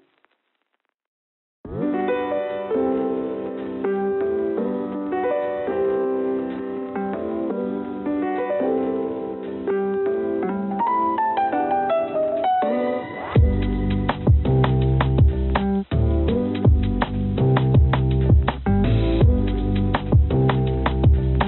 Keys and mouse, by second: 0.6 click, 1.9 shift+click, 2.7 click, 4.1 alt+e, 17.5 click, 18.1-21.4 drag, 20.1-21.4 right drag.